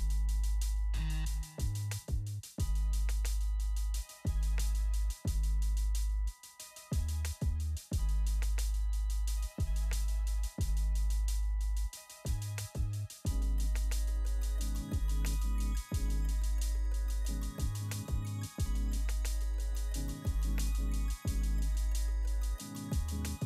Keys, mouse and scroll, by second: 1.9 shift+click, 7.0 shift+click, 10.7 shift+click, 22.8 click.